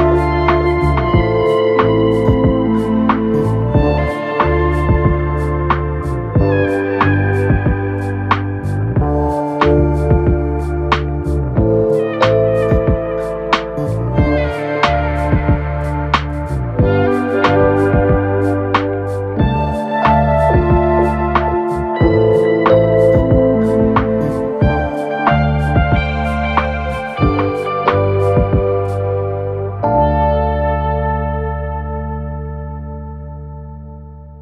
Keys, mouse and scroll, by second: 0.6 click, 1.5 shift+click, 2.2 KP_3, 3.0-4.0 shift+middle drag, 4.0 f, 4.6-6.4 right drag, 6.4-7.6 drag, 7.9-8.7 scroll up 2, 8.7 g, 10.4 click, 10.6 g, 12.9 2, 13.5 click, 14.1 shift+click, 15.0 f, 15.8 ctrl+KP_1, 18.1 ctrl+r, 21.6 g, 24.2 KP_3, 26.1 click, 27.4 1, 28.1 click, 28.8 click, 29.9 click, 30.5 click, 31.9 2, 32.2 click, 33.1 f, 33.4 f, 33.9 f, 34.3 scroll down 1.